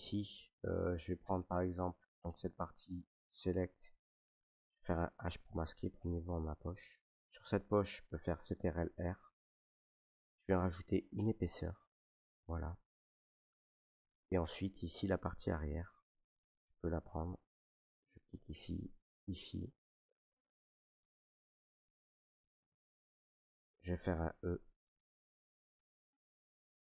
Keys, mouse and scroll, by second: 0.3 middle click, 0.3 middle click, 0.6 Tab, 1.2 Tab, 1.7 right click, 3.2 click, 4.8 h, 6.1 middle click, 6.3 middle click, 6.4 middle click, 7.1 shift+middle click, 7.2 shift+middle click, 7.3 middle click, 7.5 middle click, 8.5 ctrl+r, 10.2 click, 12.1 click, 12.5 middle click, 13.7 right click, 14.9 click, 16.4 right click, 17.9 middle click, 19.2 ctrl+right click, 20.2 middle click, 20.5 middle click, 21.3 shift+middle click, 25.0 e.